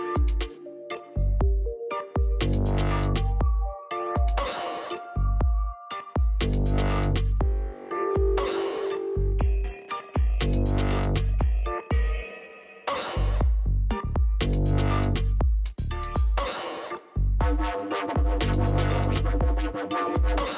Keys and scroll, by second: 0.0-4.2 typing.